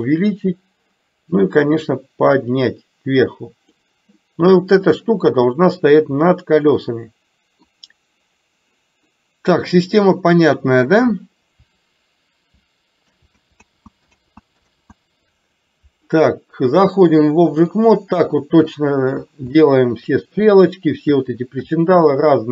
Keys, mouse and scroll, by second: 2.0-3.8 drag, 5.0-6.0 middle drag, 7.0-7.8 middle drag, 13.2 ctrl+z, 14.0 ctrl+z, 14.3 ctrl+z, 14.3 ctrl+click, 14.7 ctrl+z, 17.1 click, 18.3-18.8 middle drag, 19.7 shift+middle click, 21.8-22.2 shift+middle drag.